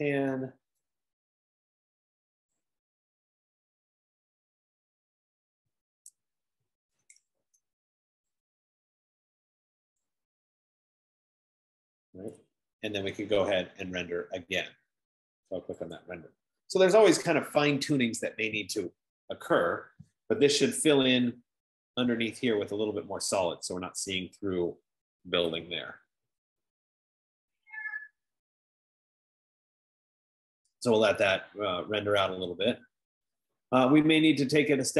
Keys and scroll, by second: 0.0-0.7 typing, 2.4-5.4 typing, 7.1-8.2 typing.